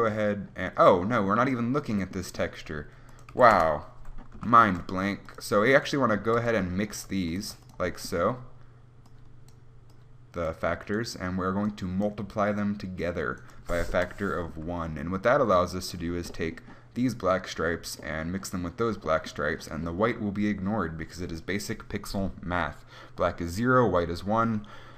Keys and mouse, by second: 4.7 shift+a, 7.2 g.